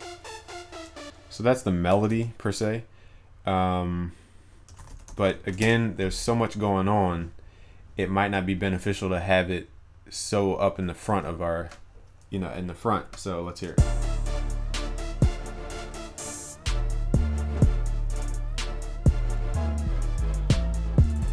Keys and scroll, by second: 2.2 ctrl+s, 11.2 ctrl+s.